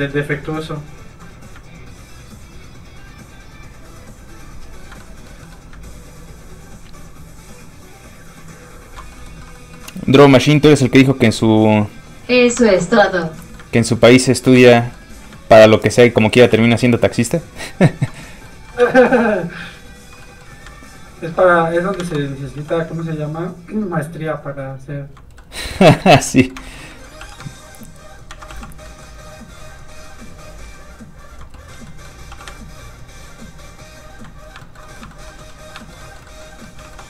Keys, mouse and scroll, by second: 1.3-1.6 scroll up 2, 5.0 click, 5.1 middle click, 5.9 ctrl+click, 10.3 ctrl+click, 12.6 shift+middle click, 12.9 middle click, 13.1 f, 13.2 click, 13.4 middle click, 13.8 ctrl+click, 14.6 shift+middle click, 14.8 middle click, 14.9 middle click, 15.1 f, 15.2 click, 15.5 ctrl+click, 16.5 click, 16.6 click, 16.9 ctrl+click, 18.3 click, 18.4 middle click, 18.8 ctrl+f, 18.9 click, 19.2 ctrl+click, 20.3 click, 20.4 middle click, 20.5 scroll up 1, 20.8 ctrl+click, 22.0 ctrl+z, 22.6 z, 22.7 click, 23.0 ctrl+click, 25.4 click, 25.5 middle click, 26.1 scroll down 1, 26.2 middle click, 26.5 scroll up 1, 26.7 shift+middle click, 26.9 middle click, 27.2 shift+f, 27.3 click, 27.6 ctrl+click, 28.3 ctrl+z, 28.6 f, 28.7 click, 28.9 middle click, 29.1 scroll up 1, 29.5 ctrl+click, 31.6 click, 31.7 middle click, 32.3 f, 32.5 ctrl+click, 34.4-34.9 ctrl+scroll down 1, 34.9 shift+middle click, 35.0 middle click, 35.1 shift+middle click, 35.3 scroll up 1, 35.4 middle click, 35.8 shift+middle click, 36.0 middle click, 36.1 middle click, 36.7 middle click, 36.8 shift+middle click.